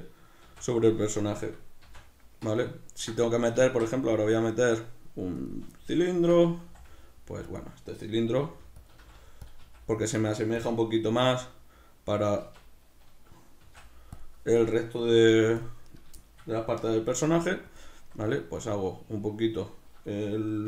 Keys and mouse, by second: 0.5 shift+a, 3.7 shift+a, 6.1 Tab, 7.6 click, 8.3 s, 8.9 click, 8.9 s, 9.5 click, 9.6 s, 10.7 click, 11.3 s, 12.2 click, 12.4 Tab, 14.2 click, 14.6 right click, 15.1 g, 15.6 click, 15.8 right click, 16.2-17.8 shift+middle drag, 17.2 g, 17.8 click, 18.0 s, 18.7 right click.